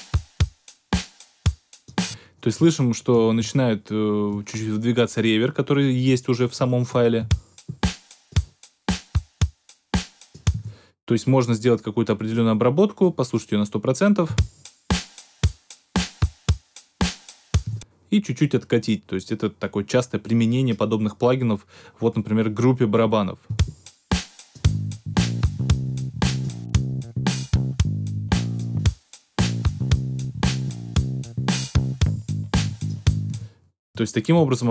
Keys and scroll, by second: 1.9 space, 2.5 alt+super+space, 7.1 alt+super+space, 7.9 space, 10.5 space, 14.2 space, 17.6 space, 23.4 space, 33.2 space, 33.9 alt+super+space.